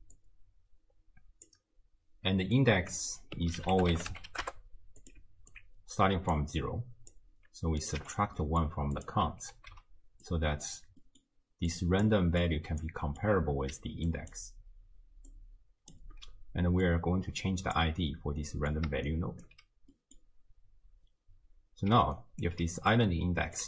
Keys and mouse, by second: 0.2-1.5 drag, 2.7-5.1 drag, 5.5-6.4 alt+drag, 6.5-7.2 drag, 7.8 click, 8.4 middle click, 9.0 click, 9.5 ctrl+h, 10.3 drag, 11.0 middle drag, 11.7-12.1 drag, 12.4-12.8 drag, 13.1 click, 13.1 middle click, 13.1 right click, 13.8-16.1 d, 14.1 click, 15.3 click, 17.0 click, 17.0 d, 18.5 drag, 18.5 right drag, 18.9 d, 19.1 click, 19.5 d, 19.9-20.3 drag, 19.9-20.3 right drag, 21.9 d, 22.2 click, 22.5 d, 22.9-23.6 drag, 22.9 d.